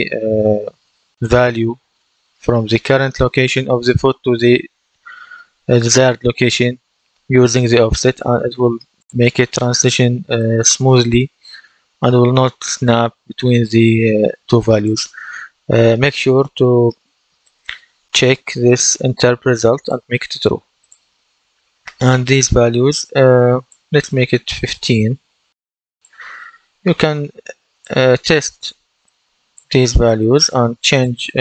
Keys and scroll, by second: 24.6 KP_1, 24.8 KP_5, 25.2 Return, 26.4 KP_1, 26.6 KP_5, 26.9 Return.